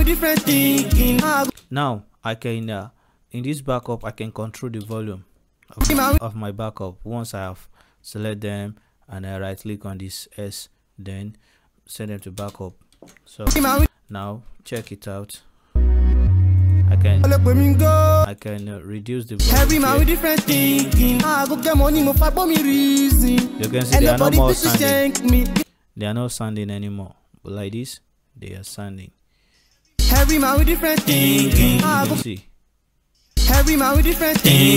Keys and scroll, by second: 0.3 m, 1.4 space, 4.9 space, 6.1 space, 12.4 space, 12.9 ctrl+s, 13.8 space, 17.9 space, 25.4 space, 28.8 space, 31.8 space.